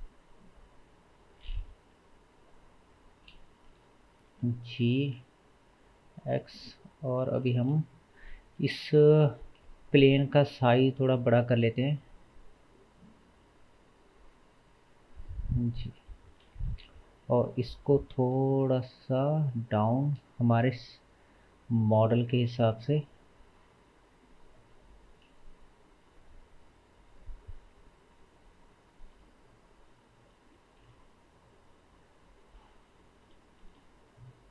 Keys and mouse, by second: 4.2 g, 8.2 click, 8.7 Tab, 9.6 2, 10.0 click, 11.0 g, 16.9 Tab, 17.9 g, 21.0 click, 22.3 g, 30.9 g, 33.2-34.5 middle drag, 33.2 g.